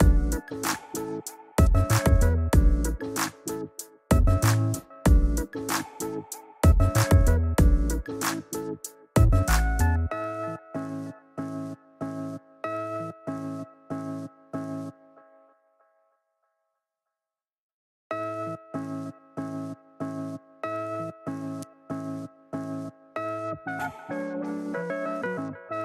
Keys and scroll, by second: 3.3 alt+super+z, 8.0 ], 10.5 ], 12.6 ], 14.4 ], 14.7 [.